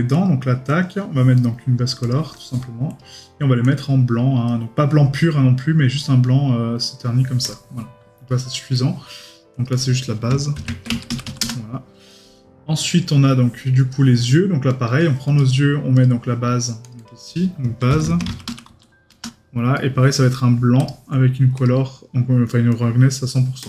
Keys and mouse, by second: 1.4 right click, 8.3 right click, 8.7 middle click, 19.8 right click.